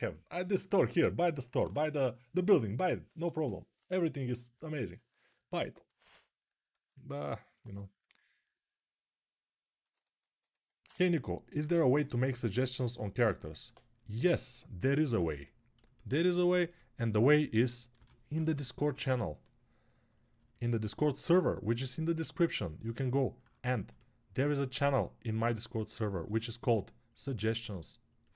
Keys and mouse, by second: 7.2-28.3 alt+drag, 15.0 alt+q, 17.7 g, 18.1 [, 18.3 [.